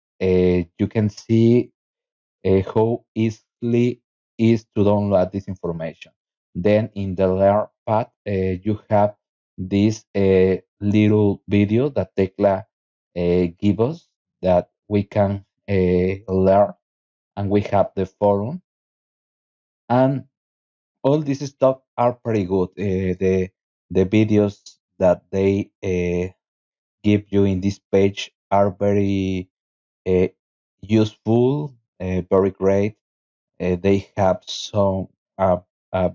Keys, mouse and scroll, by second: 2.4-3.5 scroll down 6, 4.3 scroll down 2, 5.2-5.8 scroll down 4, 6.2 scroll down 2, 6.4-7.9 scroll up 8, 8.5 scroll up 1, 13.2 click, 16.0 scroll down 2, 16.8 click, 22.3 click, 27.9 click, 28.5 click, 29.0 click, 33.6 click, 34.6 click, 35.8 click.